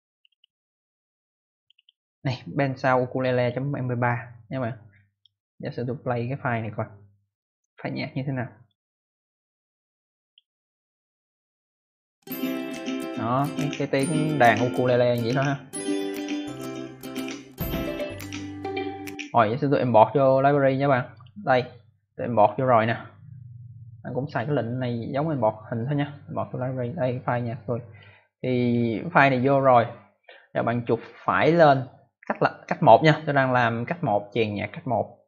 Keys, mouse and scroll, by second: 0.0 click, 0.2 click, 0.3 double click, 1.5 double click, 1.7 double click, 1.8 double click, 3.3 click, 5.0 right click, 10.2 click, 16.3 click, 18.0 click, 19.0 click, 21.0 click, 22.3 click, 24.2 click, 27.8 click, 28.5 click, 31.5 right click.